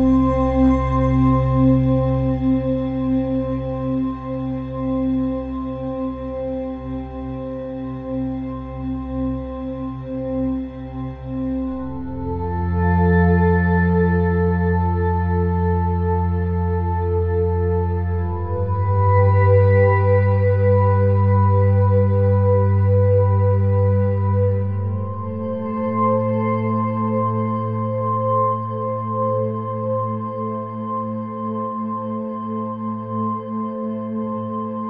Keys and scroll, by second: 22.1 -, 25.8 -, 26.8 -.